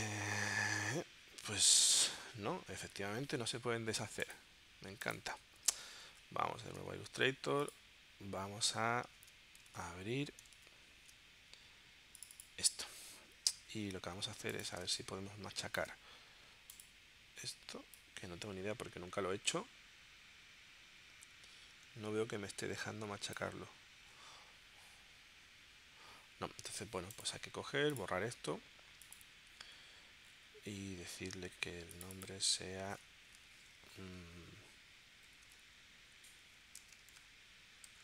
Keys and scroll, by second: 6.1 super+Tab, 9.2 super+w, 9.7 super+Tab, 10.6 super+Tab, 14.9 space, 35.3-38.0 typing.